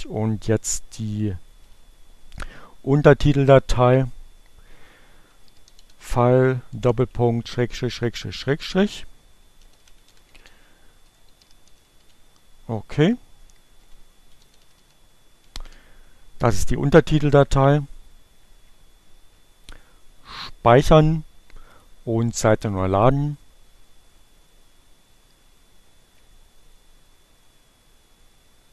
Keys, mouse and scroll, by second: 0.0-0.5 typing, 4.7-6.5 typing, 8.0-14.0 typing, 17.8 click, 19.8 click, 21.5 click.